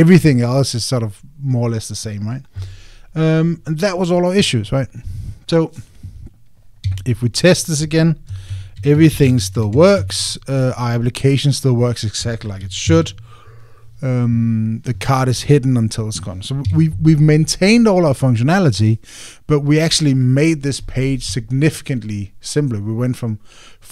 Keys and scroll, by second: 9.3 Down, 10.0 Up, 13.6 super+r.